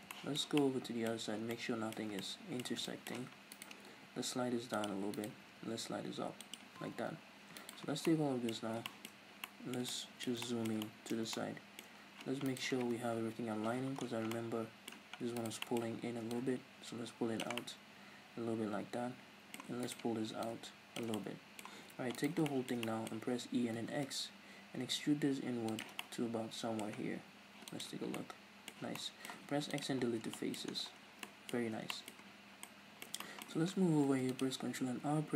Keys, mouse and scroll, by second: 1.1 scroll up 2, 1.9-3.5 ctrl+middle drag, 3.5 right click, 3.9 g, 4.9 click, 5.1 right click, 5.4 g, 6.5 click, 7.6 alt+right click, 7.9 scroll down 1, 8.1-12.5 middle drag, 8.7 scroll down 2, 9.2 scroll up 2, 12.5 right click, 13.2 KP_Decimal, 13.8 scroll down 1, 14.3-15.4 middle drag, 15.4 right click, 15.6 middle click, 16.3-17.6 drag, 17.6-19.8 middle drag, 19.8 right click, 20.5 click, 21.1-22.2 middle drag, 22.2 alt+right click, 22.5-25.8 shift+middle drag, 23.6 e, 25.8 shift+click, 26.0-35.3 middle drag, 27.0 scroll down 2, 27.2 z, 28.8 z, 29.3 x, 30.0 scroll down 2, 30.2 Tab, 30.7-31.2 scroll down 2, 31.5-32.6 scroll up 4, 31.7 Tab, 34.0 ctrl+r.